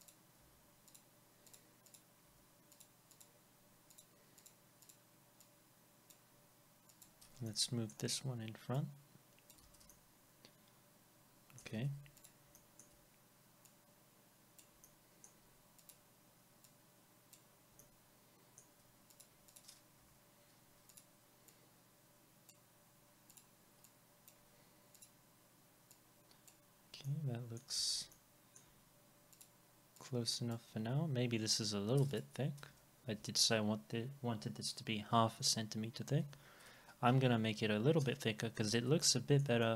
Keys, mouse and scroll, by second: 0.4 Delete, 3.2 double click, 7.5 alt+middle click, 9.6 alt+x, 9.9 alt+middle click, 11.8 alt+middle click, 12.6 alt+middle click, 14.8 alt+middle click, 17.8 alt+middle click, 19.5 double click, 20.0 Delete, 26.7 scroll down 1, 27.0 alt+middle click, 32.6 BackSpace, 36.2 6, 38.0 Return, 38.5 scroll up 1, 39.0 alt+middle click, 39.6 middle click.